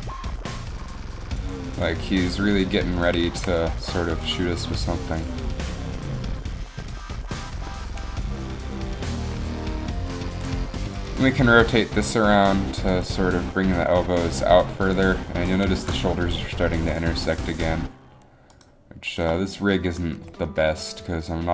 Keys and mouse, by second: 3.4 a, 4.8 r, 5.6 g, 11.6 r, 13.5 r, 15.1-16.4 drag, 17.0 right click, 17.3 r, 20.3 r.